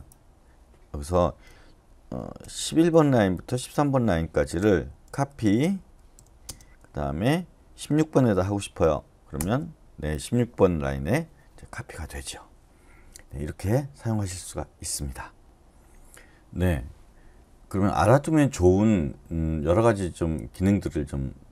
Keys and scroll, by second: 1.5-5.1 typing, 6.4 space, 7.9-8.3 typing, 9.4 Return.